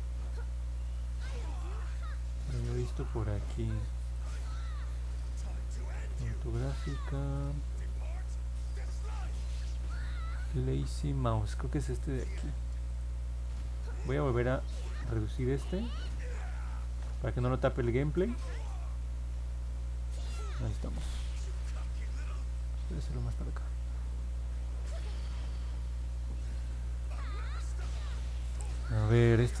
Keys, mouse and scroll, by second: 2.1-4.1 drag, 4.4 click, 5.9 click, 12.8 click, 14.0-20.2 drag, 22.5-27.0 drag.